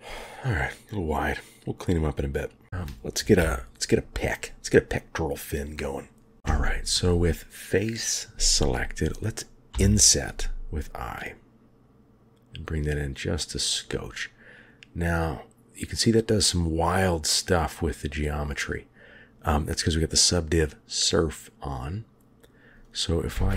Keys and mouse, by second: 2.6 g, 3.3 KP_3, 9.6 i, 23.2 2.